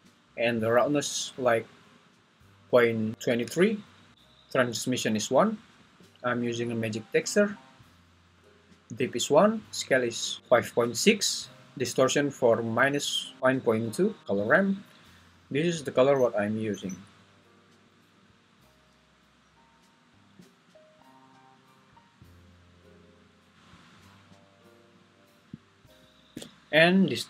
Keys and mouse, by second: 15.6 click, 16.8 click, 19.5 click, 20.8 click, 24.1 click.